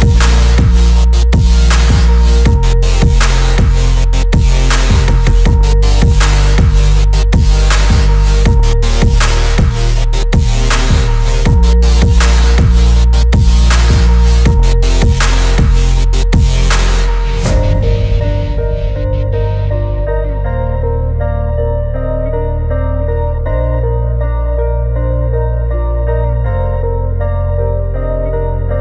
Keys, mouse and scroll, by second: 1.2 g, 5.0 right click, 6.7-7.8 drag, 8.1-9.6 drag, 8.8 0, 10.9 z, 11.7 middle click, 12.2-13.9 shift+middle drag, 14.3 middle click, 15.4 shift+middle click, 17.8 Tab, 18.1 click, 18.9 shift+click, 20.1 ctrl+p, 22.2 click, 23.5 ctrl+Tab, 25.0 r, 28.5 ctrl+Tab.